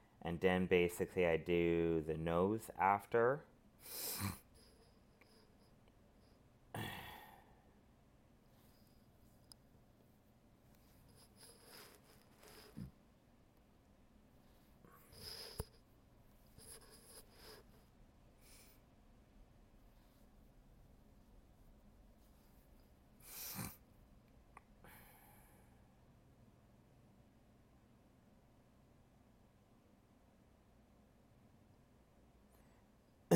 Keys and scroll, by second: 22.7 ctrl+z.